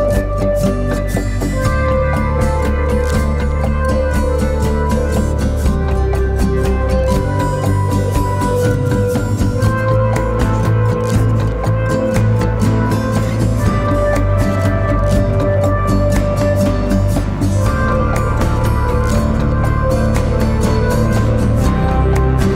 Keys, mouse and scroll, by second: 0.2 ctrl+z, 1.8 click, 4.1-8.0 typing, 4.2 click, 4.9 click, 5.6 click, 6.3 click, 6.8 click, 7.2 click, 7.8 click, 8.2 click, 11.1 z, 11.2 click, 11.5 space, 11.6 click, 14.6-15.2 scroll up 1, 15.2-16.6 scroll up 1, 16.6 right click, 17.5 click, 18.4 right click, 19.5 click.